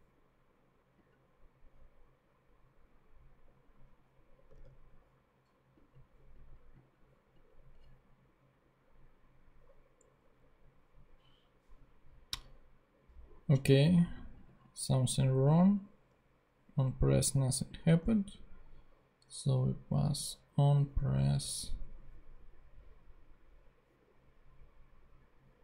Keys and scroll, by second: 4.5 super+Tab.